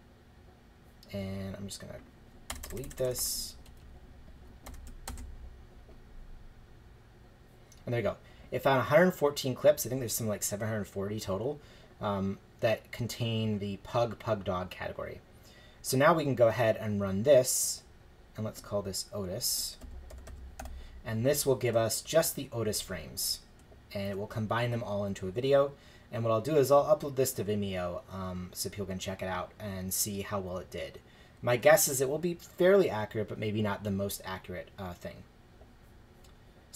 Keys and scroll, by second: 2.5 BackSpace, 3.7 Right, 4.7 BackSpace, 5.1 shift+Return, 19.6-21.1 typing, 31.4 shift+Return.